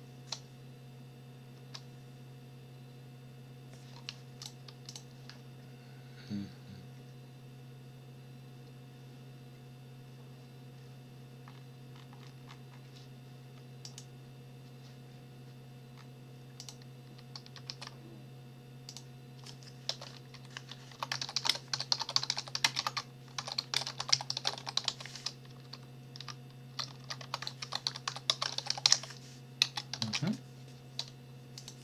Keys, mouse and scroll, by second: 1.5 Return, 4.4 click, 4.9 click, 11.5-12.6 scroll up 3, 12.6 scroll up 1, 13.8 click, 15.9 scroll up 2, 16.6 click, 17.7 ctrl+v, 18.9 click, 19.9 Return, 20.3 Up, 21.0-25.4 typing, 25.7 ctrl+Left, 26.8 ctrl+shift+Right, 27.4-30.6 typing, 31.6 click.